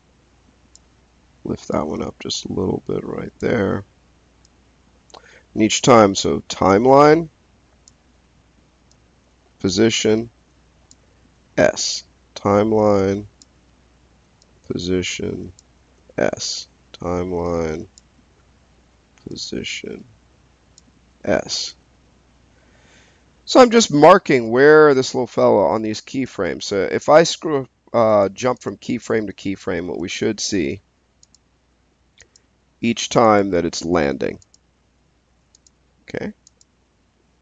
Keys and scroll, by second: 3.5 s, 11.1 s, 15.7 s, 20.9 s.